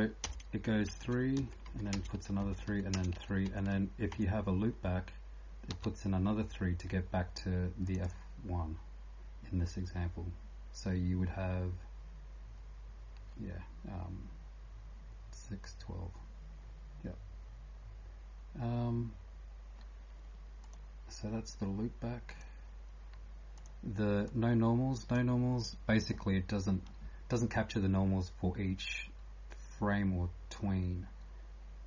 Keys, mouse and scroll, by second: 0.0-31.8 typing, 0.2 Return, 1.4 Down, 1.6 End, 1.9 Return, 2.4 Down, 2.7 End, 2.9 Return, 3.5 Down, 7.9 click, 24.3 click.